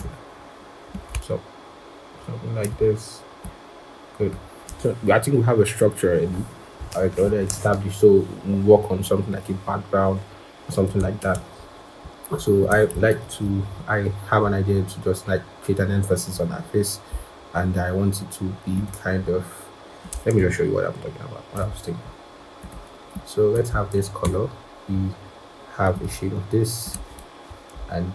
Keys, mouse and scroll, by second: 11.6 ctrl+-, 12.0-12.8 scroll, 13.0 ctrl+=, 13.1 ctrl+=, 13.6-14.0 scroll up 1, 14.0-14.4 scroll, 14.4-14.8 scroll down 1, 17.0 right click, 23.6 scroll up 1, 25.1 i.